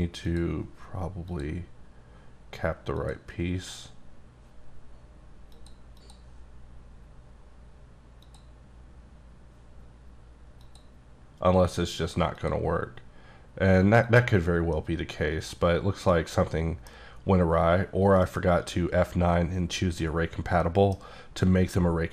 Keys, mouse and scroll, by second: 0.3 click, 2.6 click, 3.0 click, 3.6 click, 5.5 click, 7.7 click, 8.2 click, 10.6 click, 12.8 click, 14.0 click, 14.7 middle click, 15.6-16.1 scroll up 2, 16.1 middle click, 17.7 scroll down 1, 18.3 F9, 20.6 middle click.